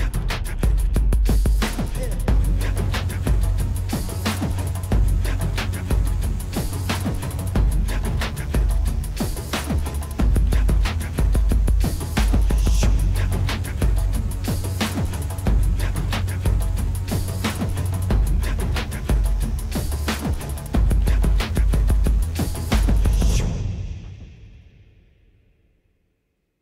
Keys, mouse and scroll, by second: 0.1 middle click, 2.1 click, 4.9 click, 10.2 click, 16.2 middle click, 19.1 click, 21.3 click, 26.5 click.